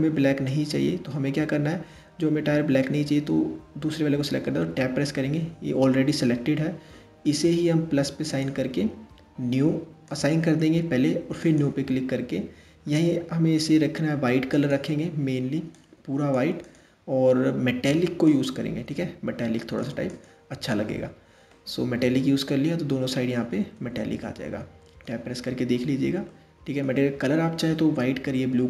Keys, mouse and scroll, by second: 0.1-3.1 middle drag, 3.9 Tab, 7.9-12.4 drag, 12.4-14.2 scroll down 5, 14.2 click, 16.3-16.9 drag, 16.9 scroll down 2, 17.9-21.2 drag, 21.2-23.4 middle drag, 23.4 Tab, 23.8-24.8 middle drag, 24.8-25.9 scroll down 2, 25.9-28.6 middle drag.